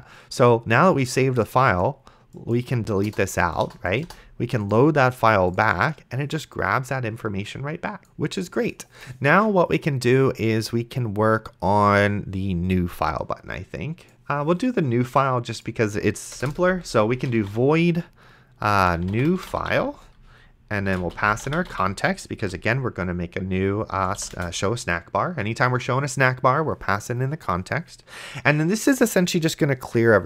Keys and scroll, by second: 3.3 BackSpace, 16.6 Return, 16.9-22.2 typing, 22.4 End, 23.9 space, 24.3 Return.